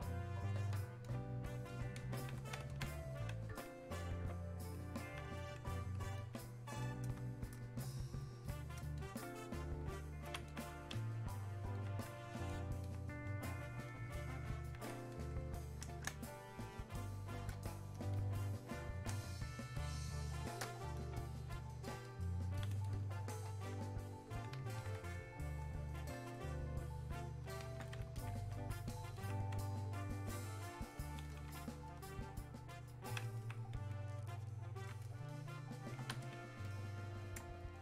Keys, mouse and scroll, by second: 2.8-10.5 alt+drag, 7.5 s, 10.5-13.9 alt+drag, 13.9-16.1 alt+drag, 16.1 space, 16.8 click, 16.9 space, 18.2 click, 19.3 space, 19.9 click, 20.0 space, 21.4-22.9 drag, 23.8-28.2 drag, 28.2-33.4 alt+drag, 33.4-37.8 alt+drag.